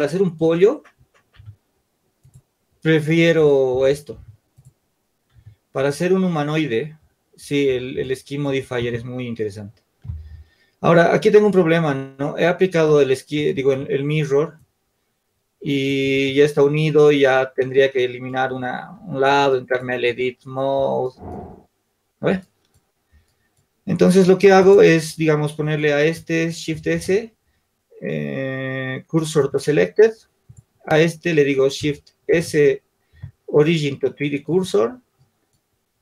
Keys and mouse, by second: 4.6 Tab, 5.8 Tab, 15.3-16.3 drag, 16.3 ctrl+z, 26.2 click, 26.8 shift+s, 30.2-36.0 drag.